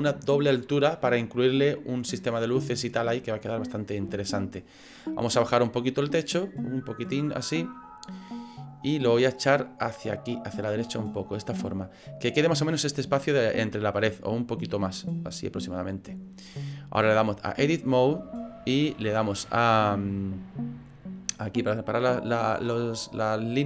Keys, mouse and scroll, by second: 4.4 middle click, 5.6 click, 9.6 click, 11.5 middle click, 13.2 middle click, 14.9 click, 17.2 click, 18.2 middle click, 21.0 click.